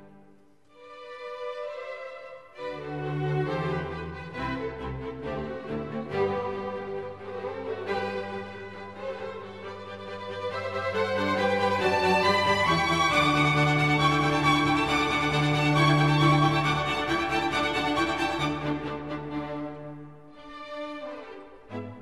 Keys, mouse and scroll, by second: 2.2-2.9 Up, 3.1 Up, 3.3 Up, 3.5 Up, 3.8 Up, 3.9 Up, 4.2 Up, 5.9 ctrl+j, 10.7 ctrl+j.